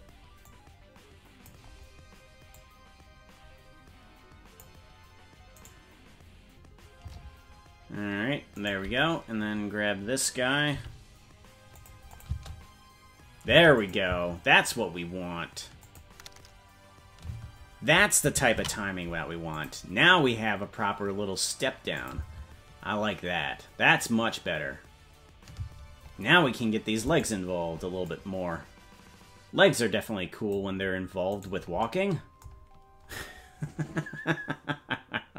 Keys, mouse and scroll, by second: 0.4-1.5 drag, 2.5-4.6 drag, 5.7 right click, 10.7 right click, 10.7 g, 12.1-13.6 drag, 12.2 space, 13.6 space, 13.7 click, 14.0 space, 15.8 click, 17.2 space, 21.2 ctrl+s, 21.4 click, 22.0 click, 22.1 space, 27.0 space, 27.2 right click, 28.0-30.6 drag, 31.4 right click.